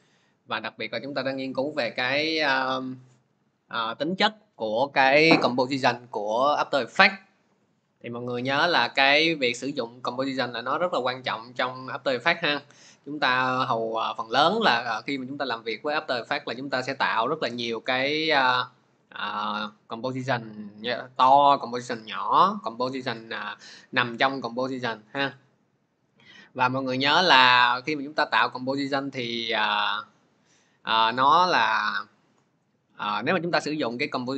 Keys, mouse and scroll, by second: 0.7-5.7 drag, 30.8 click, 32.6 click.